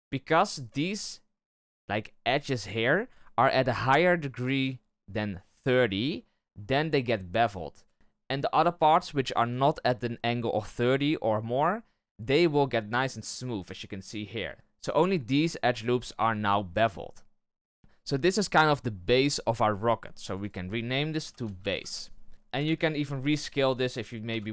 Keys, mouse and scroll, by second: 7.5-7.9 scroll down 1, 13.5-14.5 middle drag, 17.4-17.8 middle drag, 20.2 click, 20.3-22.3 drag, 22.3 shift+middle click, 22.5 KP_1, 23.0 z, 23.7 right click, 24.2 b.